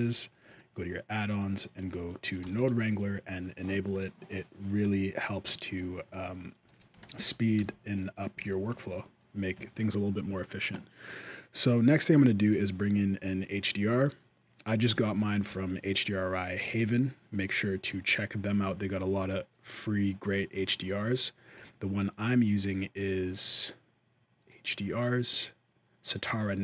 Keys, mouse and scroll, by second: 0.0 F4, 5.3 shift+middle click, 5.7-6.4 scroll down 1, 6.4-6.7 scroll down 1, 6.7 alt+a, 6.7 b, 7.4 g, 8.3 alt+a, 8.7 shift+middle click, 20.5 shift+middle click, 21.3 click.